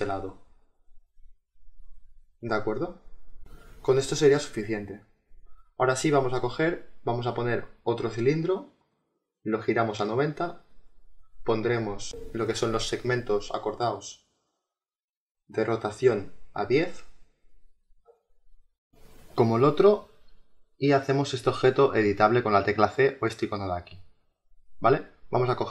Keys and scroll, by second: 14.7 t.